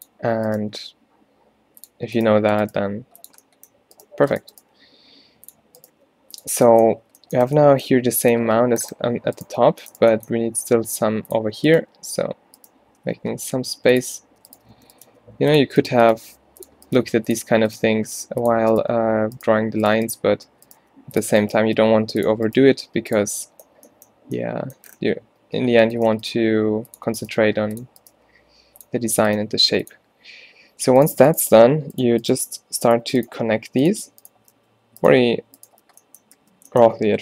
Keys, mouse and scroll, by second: 0.6 g, 2.9 g, 4.3 g, 4.7 g, 6.0 g, 10.7 g, 13.1 g, 14.8 alt+w, 15.1 g, 16.2 g, 17.1 g, 17.9 g, 20.4 alt+w, 20.9 g, 21.8 g, 22.7 g, 26.4 g, 27.4 g, 28.8 g, 29.5 g, 34.6 f, 35.9 f, 36.4 f.